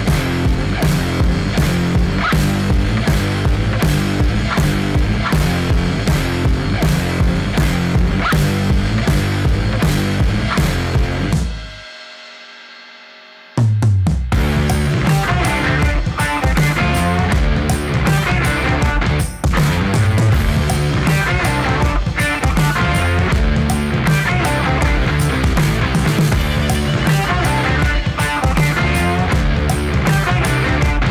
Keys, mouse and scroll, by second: 0.0-0.5 typing, 1.6 click, 6.5 Left, 7.0-7.3 typing, 10.1-12.9 drag, 13.5-15.0 typing, 17.3-19.5 drag, 17.5-18.8 typing, 19.9-20.9 typing, 22.5 typing, 23.4-29.4 drag, 29.3 ctrl+space, 29.5-31.1 typing.